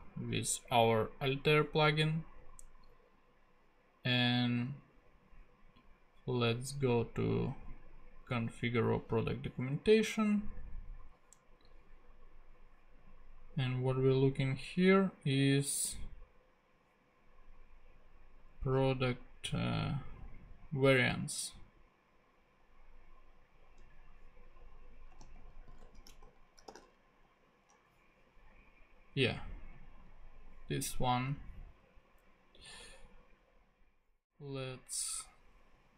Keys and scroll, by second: 25.2 super+f, 25.7 super+v, 25.8-27.3 typing, 28.6 ⟲.